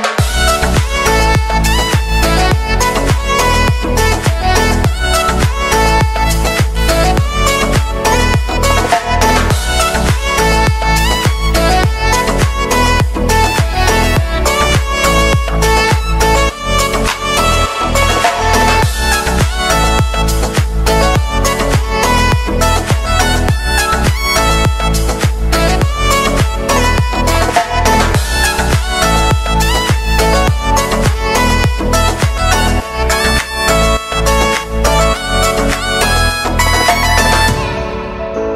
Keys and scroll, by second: 23.6 ctrl+z.